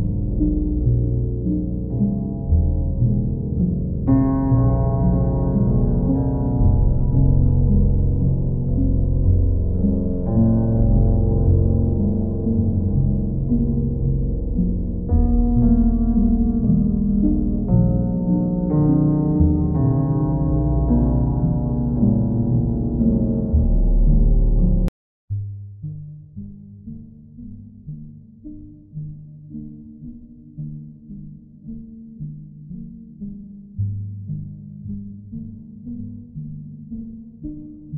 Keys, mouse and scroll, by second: 1.1 alt+click, 3.0 click, 3.6 ctrl+click, 5.7 alt+click, 10.8 alt+click, 11.0 ctrl+click, 13.1 ctrl+click, 13.9 ctrl+click, 19.6 click, 20.3 ctrl+click, 21.4 ctrl+click, 21.8 ctrl+click, 23.9 click, 24.9 alt+click, 27.9 alt+click, 28.4 ctrl+click, 30.3 click, 30.7 click, 31.3 click, 31.7 shift+click, 32.5 shift+click, 32.5 click, 32.9 click, 33.2 click, 33.5 click, 33.9 shift+click, 34.6 shift+click, 35.3 alt+click.